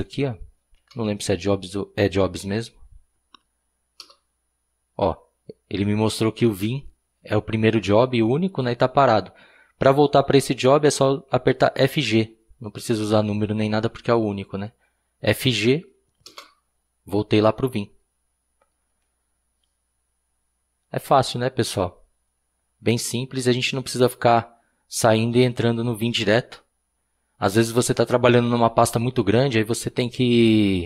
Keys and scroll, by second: 1.4 b, 1.5 Tab, 4.0 Return, 10.9 typing, 16.3 Return.